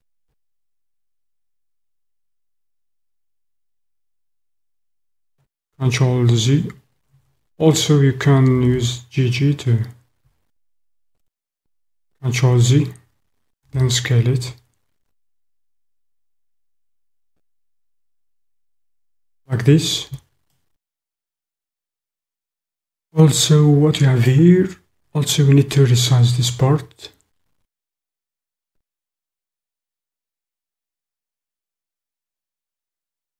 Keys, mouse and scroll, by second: 5.2 click, 7.1 ctrl+z, 8.5 g, 8.8 g, 11.2 click, 12.4 ctrl+z, 13.6 s, 19.0 click, 20.5 click, 20.7 click, 20.8 middle click, 21.0-24.3 middle drag, 31.2 s.